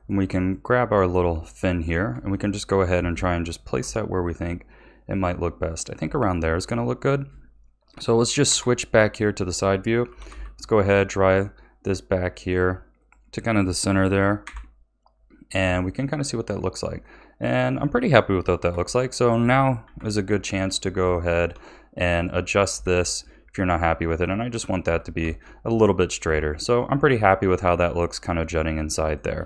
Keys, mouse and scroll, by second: 0.4 click, 1.1 r, 2.3-3.8 shift+middle drag, 3.8 g, 6.1-8.4 shift+middle drag, 8.4 KP_3, 10.0 g, 14.4 KP_1, 15.6 a, 15.9 scroll down 4, 16.4-17.0 scroll up 5, 17.0-18.5 middle drag, 18.5 KP_3, 19.8 KP_1, 20.4 click, 21.0 Tab, 22.1 click, 22.6 r, 24.8 a, 25.2 Tab, 25.8 scroll down 2, 26.2 a, 28.6-29.4 middle drag.